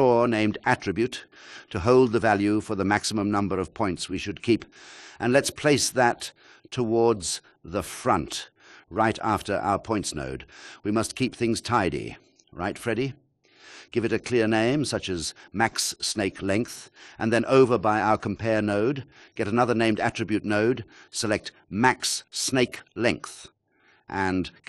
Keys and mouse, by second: 1.8 click, 2.6 click, 11.1 shift+a, 14.6 click, 14.8 click, 18.7 alt+shift+KP_0, 20.2 click, 21.3 shift+d, 22.2 click.